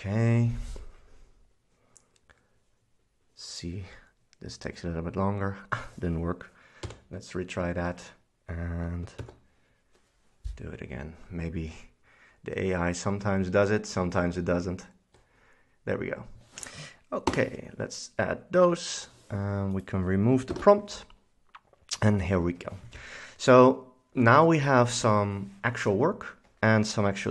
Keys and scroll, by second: 6.9 r, 9.3 super+s, 17.4 Return, 17.7 v, 20.6 shift+super+Delete.